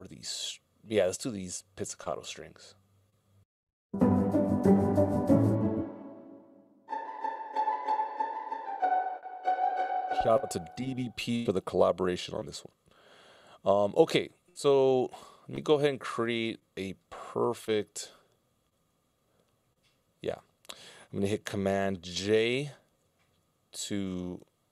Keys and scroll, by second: 2.4 space, 8.9 space, 16.4 BackSpace, 22.9 super+j, 24.1 Return.